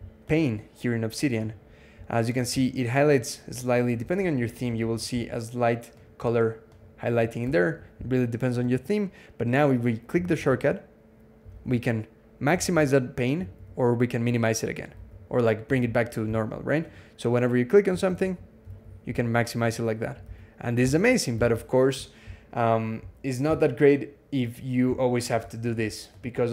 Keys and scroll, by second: 4.0 super+=, 7.4 super+0, 10.1 alt+x, 11.3 alt+x, 12.4 alt+x, 14.8 alt+x, 17.9 alt+x, 18.5 alt+x, 20.1 alt+x, 20.6 alt+x, 21.2 alt+x.